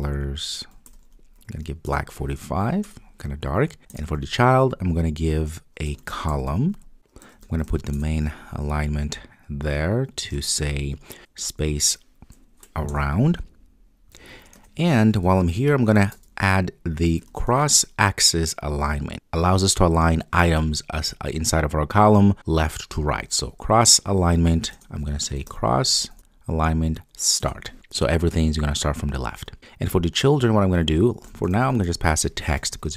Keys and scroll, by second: 3.9 Return, 7.9 Return, 12.9 Return, 24.7 Return, 27.4 Return.